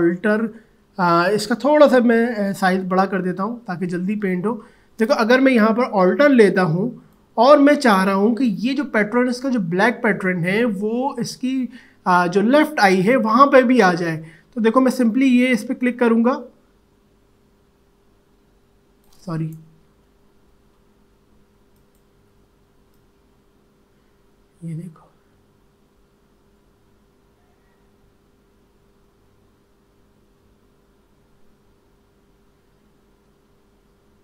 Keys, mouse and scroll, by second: 0.9 click, 3.0-3.4 typing, 6.4-9.7 alt+drag, 14.9-19.9 drag, 19.9 ctrl+z, 21.8-32.9 alt+drag.